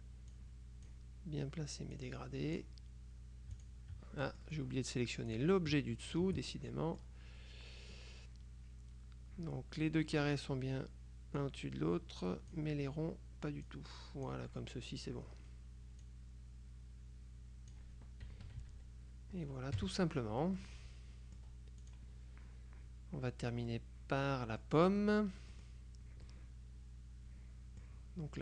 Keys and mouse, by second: 0.4-1.5 drag, 2.1-3.2 drag, 3.7 shift+click, 4.4 shift+middle click, 5.4 click, 6.2 shift+click, 6.6 shift+middle click, 11.5-13.1 drag, 13.8-14.9 drag, 16.1-18.3 drag, 18.5 KP_Subtract, 19.9 KP_Subtract, 20.7-22.0 drag, 23.8-25.2 drag, 25.7 click, 26.4-28.4 drag.